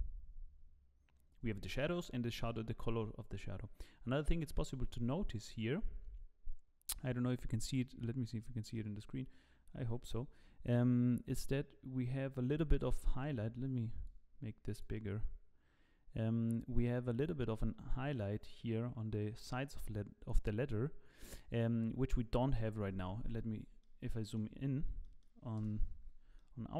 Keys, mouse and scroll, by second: 22.4 scroll up 3, 24.0 middle click, 24.0 scroll up 2, 25.0 middle click, 25.6 KP_0, 26.6 shift+middle click.